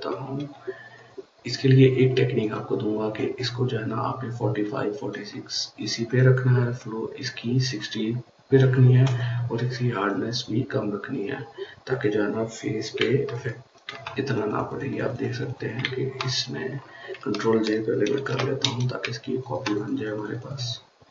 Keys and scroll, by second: 0.0-0.1 typing, 17.9 ctrl+j.